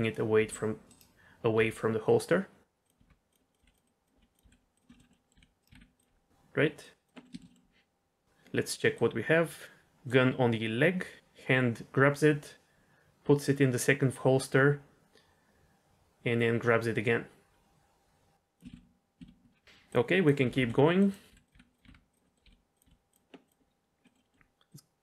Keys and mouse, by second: 0.3 r, 1.5 g, 2.9-5.7 typing, 3.5 click, 3.8 click, 4.9 middle click, 5.1 middle click, 6.8 drag, 7.1 middle click, 7.3 shift+middle click, 7.5 middle click, 8.9-9.8 drag, 10.0-18.5 drag, 18.7 ctrl+z, 19.4 ctrl+z, 19.8 click, 20.4-22.8 typing, 22.2 middle click, 23.4 click, 24.0 middle drag, 24.2 middle click, 24.7 click.